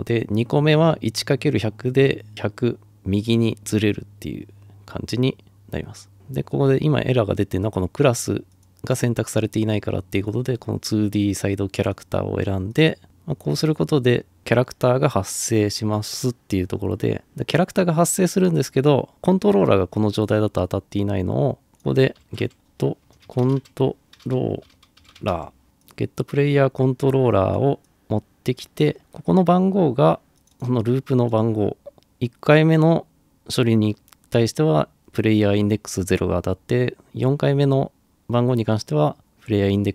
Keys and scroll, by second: 22.0-25.9 typing.